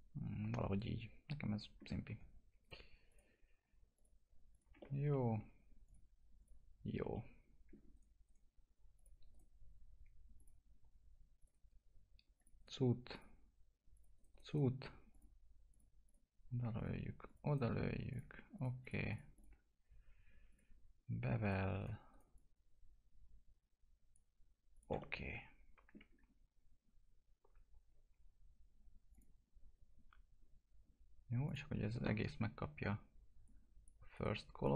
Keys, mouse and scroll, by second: 2.0 1, 2.6 right click, 3.1 click, 5.1 alt+middle click, 5.8 click, 7.1 alt+middle click, 7.9 right click, 8.9 click, 9.3 right click, 10.3 click, 12.5 right click, 13.1 click, 14.1 right click, 15.1 click, 17.5 right click, 18.1 click, 21.4 right click, 22.3-24.7 drag, 24.9-29.1 alt+middle drag, 29.1 click, 31.4 click, 34.1 right click, 34.6 click.